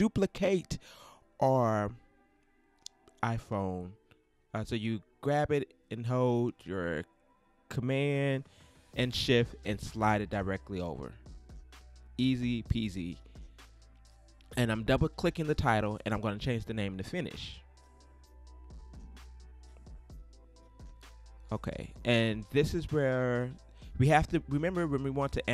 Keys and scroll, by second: 10.1 alt+shift+space, 10.7 shift+space, 15.8-19.9 typing.